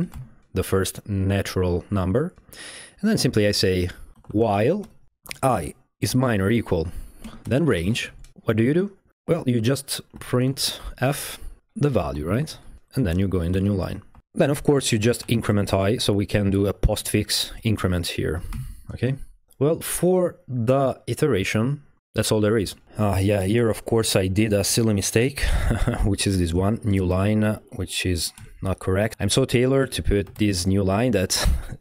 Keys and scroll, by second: 0.0-0.1 typing, 3.3 Down, 3.9-8.7 typing, 9.9-15.7 typing, 11.6 Left, 16.9-18.5 typing, 25.5-28.4 typing, 29.0 Escape, 29.8-31.0 typing.